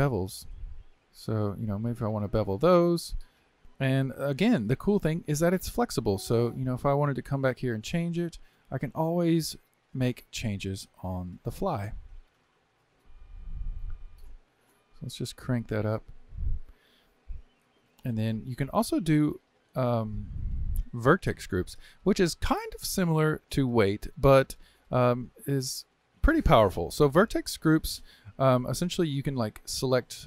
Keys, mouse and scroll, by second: 3.6-6.6 middle drag, 6.6-12.6 drag, 14.3-17.4 drag, 18.3-21.4 drag, 28.4 click, 29.4 shift+click.